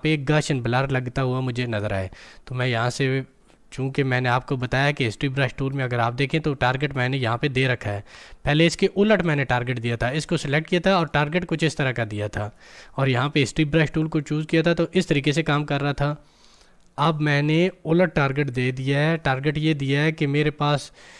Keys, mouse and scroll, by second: 10.1 click, 13.7-18.5 drag, 18.5 ctrl+z.